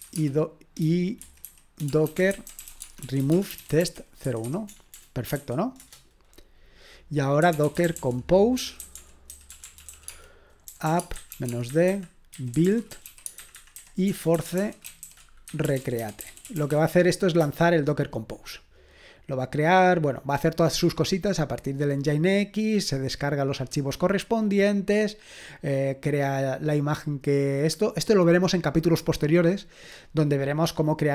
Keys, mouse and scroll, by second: 0.0-5.4 typing, 7.2-17.2 typing.